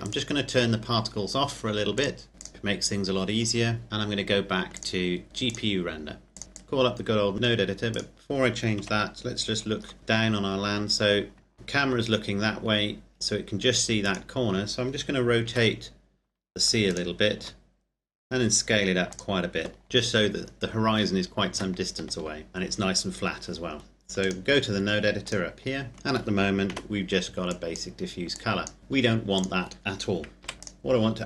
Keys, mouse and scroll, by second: 0.2 right click, 2.0 click, 4.7 click, 7.9 right click, 8.8 KP_7, 9.5-10.0 scroll down 1, 10.0 KP_Decimal, 10.5-11.4 scroll up 1, 11.5 shift+click, 12.2-14.4 scroll down 1, 14.4 right click, 15.7 r, 17.1 click, 17.6 s, 19.3 click, 21.5 Tab, 22.5 KP_0, 24.4 click, 25.9-26.9 scroll up 1, 26.9 n, 27.5 click, 29.5 click, 30.5 Delete, 30.7 click.